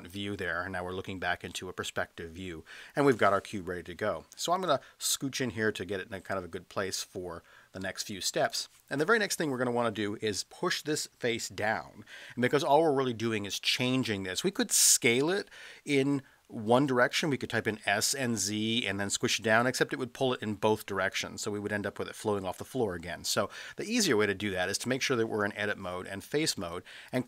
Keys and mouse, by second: 4.8 space, 6.5 space, 7.9 space.